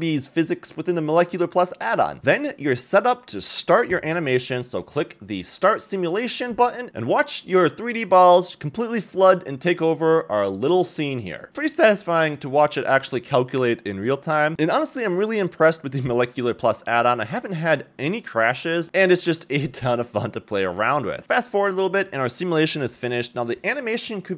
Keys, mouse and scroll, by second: 0.0 shift+middle drag, 0.4-0.8 middle drag, 1.1-1.5 scroll down 1, 1.5 scroll up 1, 2.0 shift+middle click, 3.0 click, 7.5-8.3 middle drag, 8.7 scroll down 1, 9.1-9.9 middle drag, 10.1-11.0 shift+middle drag, 11.8-12.5 middle drag, 13.6 click, 14.5 shift+middle click, 14.5 click, 14.5 a, 15.5 scroll down 2, 15.7-17.1 middle drag, 17.3 shift+middle click, 17.5 s, 18.5-19.5 shift+middle drag, 19.9 shift+middle click, 21.2 shift+middle click, 23.6-23.9 scroll up 3, 24.2 middle click.